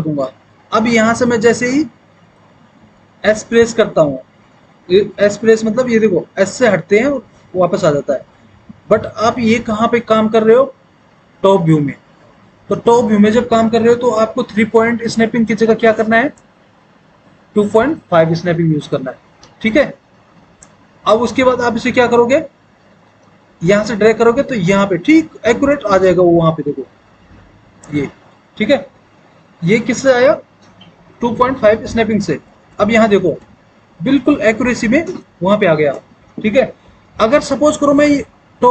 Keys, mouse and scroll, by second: 6.1-10.0 typing, 25.8 click, 32.8 alt+w, 33.6 alt+w.